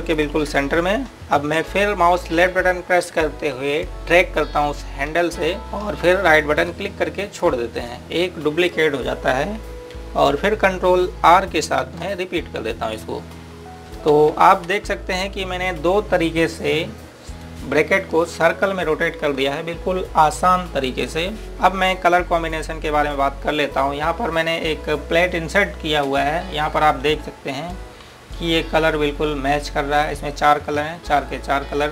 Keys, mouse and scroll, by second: 1.8-2.3 scroll down 1, 3.3-5.4 scroll up 1, 5.6 click, 7.6 right click, 13.7 typing, 15.6 typing, 16.5-17.7 scroll down 1, 17.7-19.6 scroll up 1, 21.4-23.4 scroll down 1, 23.4-26.7 scroll up 1, 27.1 scroll up 1.